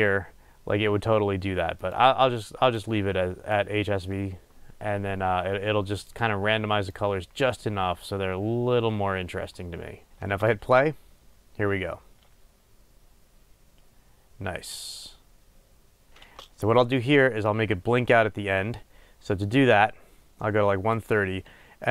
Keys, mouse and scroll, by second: 10.5 space, 16.5 space.